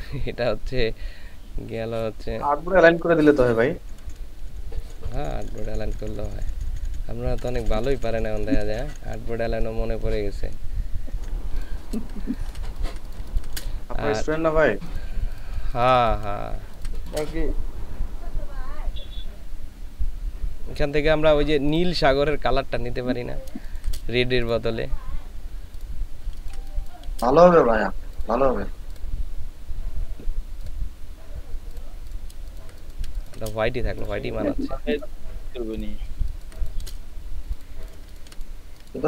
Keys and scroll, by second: 2.9 Down, 4.0 Down, 4.2 Down, 4.3 Down, 4.6 Down, 12.2 ctrl+space, 15.8 ctrl+space, 16.5 ctrl+space, 23.6 ctrl+space, 26.4 ctrl+space, 32.4 ctrl+space, 36.2 ctrl+space, 38.9 ctrl+space.